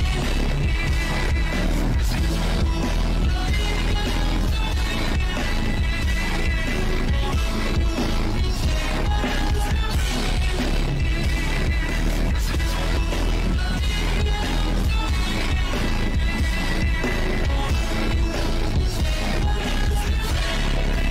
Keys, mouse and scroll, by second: 1.8 click, 2.2 click, 3.2 click, 3.6 click, 4.9 click, 5.8 click, 6.3 click, 8.0 click, 8.4 shift+`, 9.1 click, 9.6 click, 10.1 click, 10.8 click, 11.4 ctrl+z, 12.3 click, 12.9 click, 13.9 click, 15.0 click, 18.4-18.8 scroll down 3, 18.8 click, 19.0 click, 19.5 click, 19.8 scroll up 2, 20.0 scroll down 1, 20.4 click.